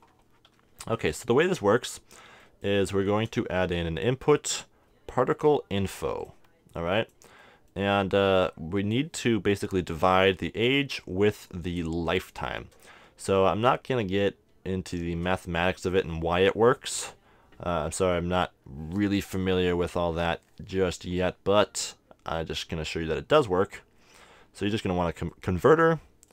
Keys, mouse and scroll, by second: 1.3-4.2 middle drag, 3.0 shift+a, 7.5-10.9 middle drag, 8.4-10.1 drag, 11.5-13.4 drag, 14.9 shift+a.